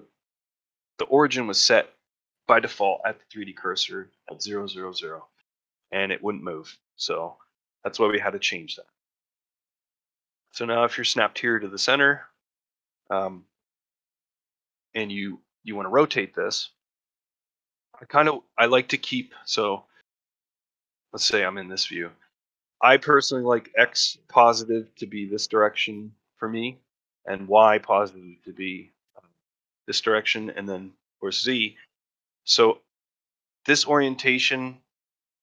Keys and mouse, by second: 8.8-9.1 middle drag, 9.3 shift+middle drag, 9.6-10.1 middle drag, 10.3 middle drag, 10.6 middle drag, 11.2 middle drag, 11.5 middle drag, 11.9 middle drag, 12.3 shift+middle drag, 12.5 middle drag, 12.9 shift+middle drag, 13.2-13.8 middle drag, 14.1 shift+middle drag, 16.0 middle click, 16.4 shift+middle click, 16.7-17.4 ctrl+shift+middle drag, 17.9 ctrl+middle drag, 18.2 shift+middle click, 18.5 middle drag, 18.9-19.4 shift+middle drag, 19.7-20.3 middle drag, 20.5 shift+middle drag, 20.9-21.7 middle drag, 21.9 shift+middle drag, 26.3-26.7 middle drag, 30.1 shift+middle drag, 30.4 middle drag, 31.5 middle drag, 31.9 shift+middle drag, 32.5 middle drag, 32.9 shift+middle drag.